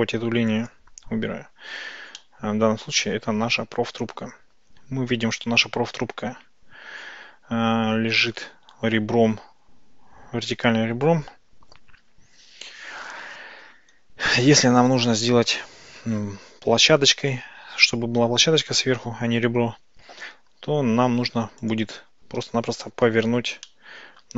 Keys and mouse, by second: 2.2-8.5 middle drag, 21.8 click, 23.7-24.3 drag.